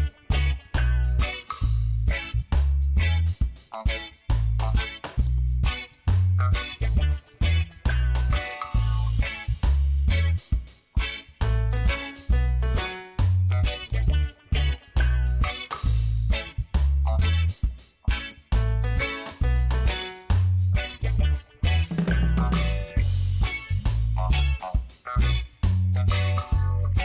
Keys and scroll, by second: 11.1 ctrl+d, 11.6 space, 20.3 ctrl+d, 20.7 space, 26.6 ctrl+d, 26.7 space.